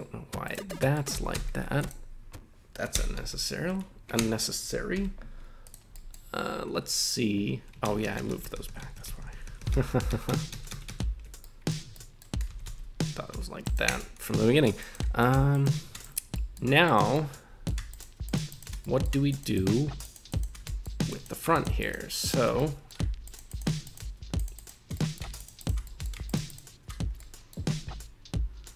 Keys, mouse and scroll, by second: 0.4 right click, 0.7 middle click, 1.1 g, 1.3 g, 1.8 click, 2.9 l, 3.2 ,, 4.3 Escape, 4.9 m, 5.9 middle click, 7.8 ctrl+z, 8.0 ctrl+z, 8.2 ctrl+z, 8.3 ctrl+z, 8.4 ctrl+z, 8.5 ctrl+z, 8.7 ctrl+z, 8.8 ctrl+z, 8.9 ctrl+z, 9.1 ctrl+z, 9.2 ctrl+z, 9.3 ctrl+z, 9.4 ctrl+z, 9.6 ctrl+z, 9.7 ctrl+z, 9.9 ctrl+z, 10.1 ctrl+z, 10.3 ctrl+z, 10.5 ctrl+z, 10.7 ctrl+z, 10.9 ctrl+z, 11.4 middle click, 11.9 middle click, 12.5 g, 12.6 g, 13.6 right click, 13.9 Tab, 14.5 Tab, 14.8 right click, 15.2 shift+right click, 15.5 shift+right click, 16.0 right click, 16.3 middle click, 16.8 shift+right click, 17.1 middle click, 17.9 shift+right click, 18.2 shift+right click, 18.5 shift+right click, 18.8 middle click, 19.3 shift+right click, 19.5 shift+right click, 20.0 shift+right click, 20.3 shift+right click, 20.6 middle click, 21.1 right click, 21.5 shift+right click, 21.8 shift+right click, 22.5 middle click, 23.2 shift+right click, 23.5 shift+right click, 23.8 shift+right click, 24.3 shift+right click, 24.5 shift+right click, 24.9 middle click, 25.4 shift+right click, 25.6 shift+right click, 25.8 middle click, 26.3 shift+right click, 26.5 shift+right click, 27.0 scroll down 2, 27.2 middle click.